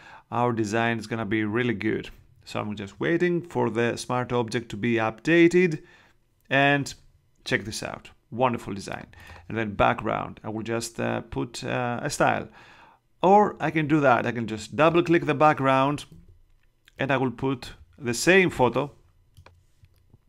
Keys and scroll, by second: 16.3 super+Tab.